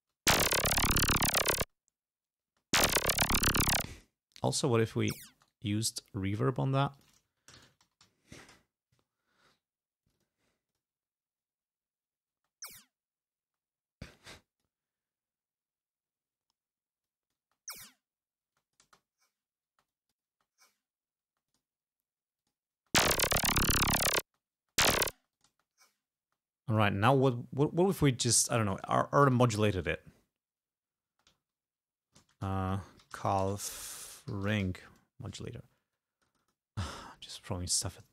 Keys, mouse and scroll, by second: 0.2 space, 1.7 space, 2.7 space, 3.9 space, 4.0 click, 4.6 click, 4.9 space, 5.5 right click, 7.0 click, 7.2-9.1 typing, 10.1 click, 10.8 click, 12.5 space, 13.6 space, 14.4 click, 17.1 click, 17.5 space, 18.6 space, 18.6 click, 19.8 space, 20.0 click, 21.3 space, 21.5 click, 22.4 click, 22.8 space, 24.3 space, 25.4 click, 26.2 space, 26.8 right click, 27.9 click, 29.0-29.8 typing, 31.1-35.1 typing, 32.2 ctrl+a, 32.3 ctrl+BackSpace, 36.0 click, 37.2 click.